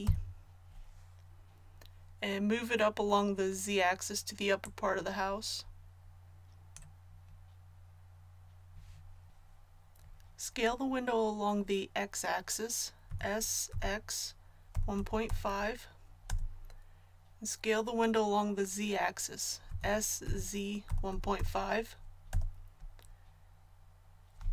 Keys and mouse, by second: 0.0 l, 4.6-6.5 drag, 13.1 s, 19.7 s.